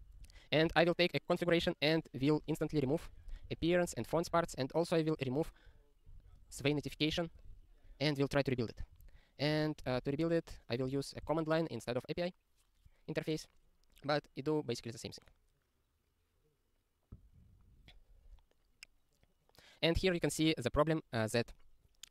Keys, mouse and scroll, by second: 2.3 ctrl+n, 2.6 ctrl+n, 2.8 ctrl+a, 2.9 ctrl+n, 3.0 ctrl+n, 3.2 alt+;, 3.6 ctrl+s, 3.7 ctrl+n, 3.9 ctrl+space, 4.2 alt+;, 4.5-5.2 ctrl+p, 5.3 ctrl+p, 5.4 ctrl+p, 5.7 ctrl+space, 6.1 ctrl+g, 6.2 ctrl+n, 6.3 ctrl+space, 6.4 ctrl+n, 6.6 alt+;, 6.9 ctrl+s, 9.0 super+r, 10.5 n, 11.0 Return.